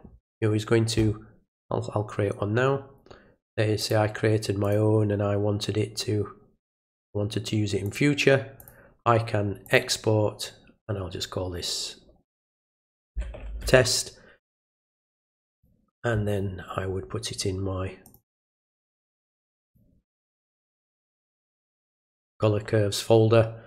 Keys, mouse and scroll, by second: 3.8 click, 4.6 click, 6.7 click, 7.9 click, 8.6 click, 9.7 click, 15.5 click, 18.1 click, 19.5 click, 19.7 click, 21.4 click.